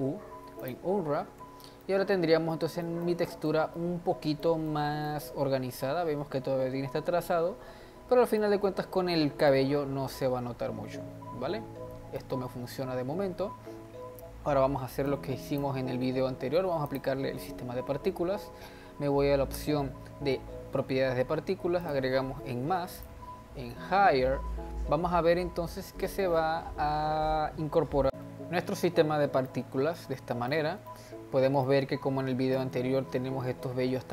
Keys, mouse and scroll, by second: 1.4 Tab, 1.8-5.4 middle drag, 5.4-8.4 scroll up 3, 8.4-9.8 middle drag, 9.8-10.2 scroll down 3, 10.2-12.6 middle drag, 12.6-14.4 scroll up 1, 14.4-15.1 scroll up 1, 15.1-16.9 drag, 21.8-24.9 drag, 29.4-31.3 shift+middle drag, 31.3-31.6 scroll down 1, 31.6-34.1 middle drag.